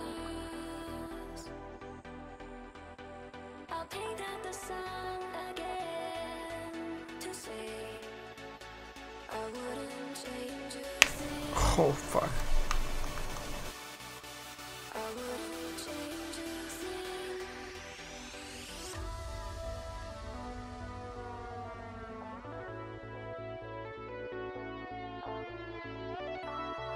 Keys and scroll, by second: 15.0 s.